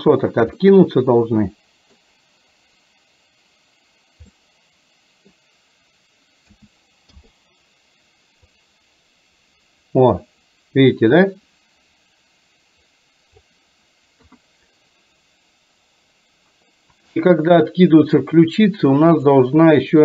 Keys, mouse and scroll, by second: 0.8-2.2 middle drag, 4.5-5.4 middle drag, 6.5 a, 7.3 i, 8.7-13.5 drag, 14.3 KP_3.